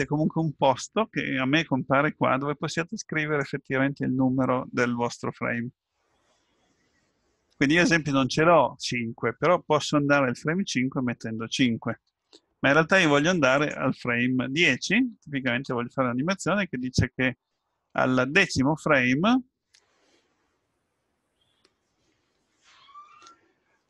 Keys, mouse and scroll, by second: 3.2 click, 13.6 click.